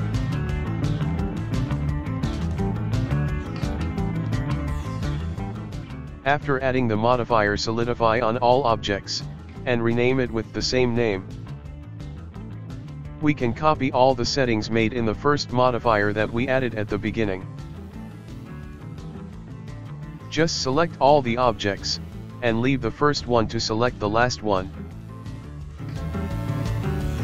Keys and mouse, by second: 0.4 drag, 1.2 drag, 2.2 click, 2.7 click, 3.3-3.9 drag, 4.2-5.0 drag, 5.9 shift+right drag, 6.1-10.2 ctrl+middle drag, 10.2 shift+right click, 12.3-15.7 right drag, 15.7-17.7 middle drag, 17.7 click, 18.2-19.8 middle drag, 19.8-22.1 right drag, 22.1-23.6 drag, 23.6-27.2 right drag.